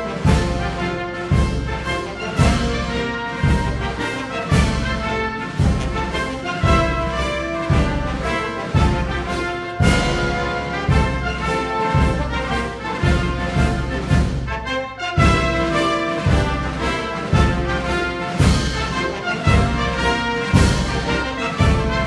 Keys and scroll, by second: 9.6 Right, 9.6 Left, 11.2 Right, 15.4 Right, 18.8 Right.